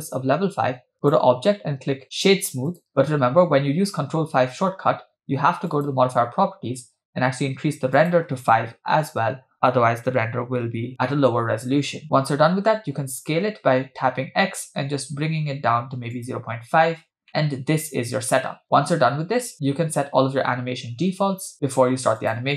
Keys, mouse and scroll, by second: 1.0-2.9 drag, 5.7 click, 8.0-9.2 drag, 11.6-12.0 scroll up 2, 12.7 s, 17.3-19.6 middle drag, 22.2 click.